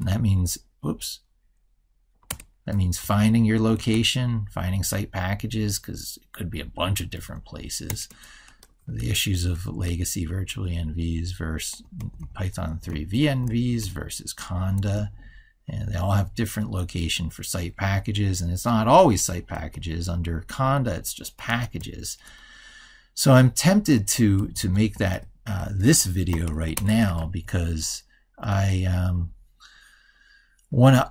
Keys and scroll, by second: 27.1 ctrl+super+Right.